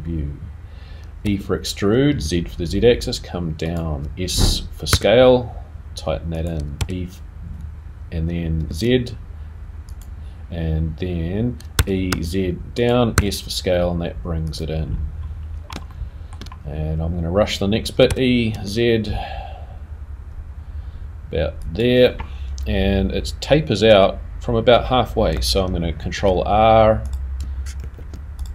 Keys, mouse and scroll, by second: 1.2 e, 6.5 s, 10.7-11.7 scroll up 2, 11.7 e, 13.1 s, 14.8 scroll down 3, 15.2 scroll up 2, 15.4-15.7 scroll down 2, 15.9 shift+middle click, 18.1 e.